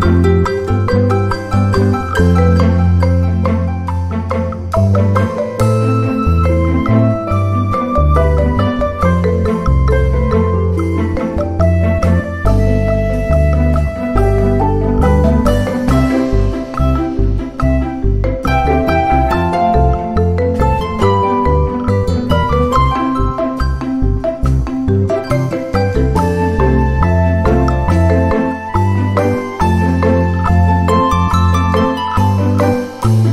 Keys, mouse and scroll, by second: 0.6 shift+click, 1.5 ctrl+g, 5.2 click, 6.3 click, 7.3 ctrl+scroll up 2, 7.6 ctrl+click, 8.3 ctrl+click, 9.0 ctrl+Delete, 9.6-9.9 ctrl+scroll down 1, 10.8 click, 11.6 ctrl+scroll up 2, 11.9 ctrl+click, 12.5 ctrl+click, 13.1 ctrl+click, 14.0 click, 15.4 ctrl+scroll down 2, 17.6 click, 18.5 ctrl+d, 19.2-20.5 ctrl+shift+drag, 20.7-28.4 ctrl+shift+drag, 24.4 space, 25.3 space, 26.3 space, 27.2 space, 28.7 click, 29.6 click, 30.8-31.9 drag, 32.0 click.